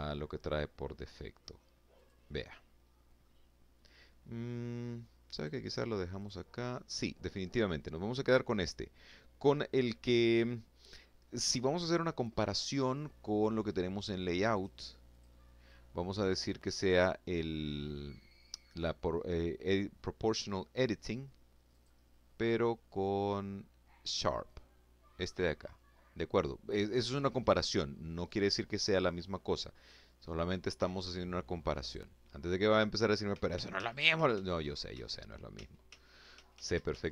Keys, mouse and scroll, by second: 0.5 click, 1.1 click, 1.9-3.9 middle drag, 3.9 click, 4.7 click, 5.3 click, 13.1 click, 13.6 click, 15.5 click, 20.3 click, 30.4 click, 32.3 ctrl+z, 35.9-37.1 ctrl+drag.